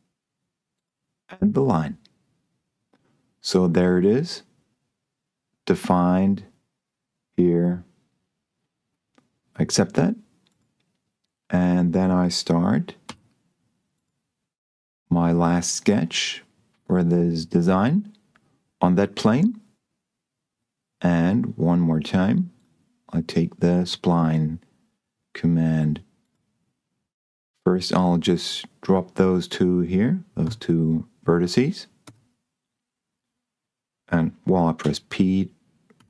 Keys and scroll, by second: 13.3 s, 30.7 Escape, 32.3 Escape, 35.1 p.